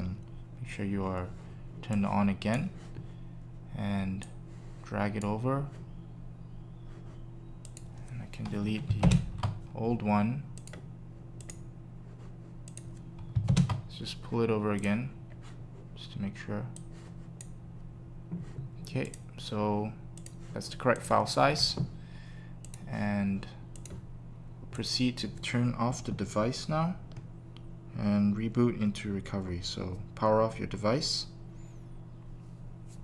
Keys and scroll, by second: 9.0 super+BackSpace, 13.4 super+BackSpace.